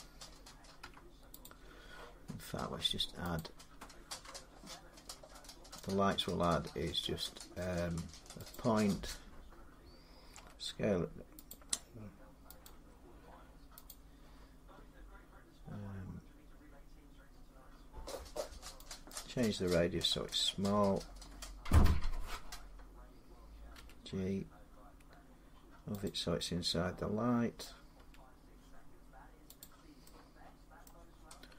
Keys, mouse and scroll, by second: 0.6 x, 1.2 click, 3.2 click, 8.3 click, 10.1 s, 10.9-16.3 drag, 21.6 click, 23.5 g, 23.9-26.6 drag, 27.4 middle click, 27.7 g, 29.4 click, 30.6 middle click, 31.3 g.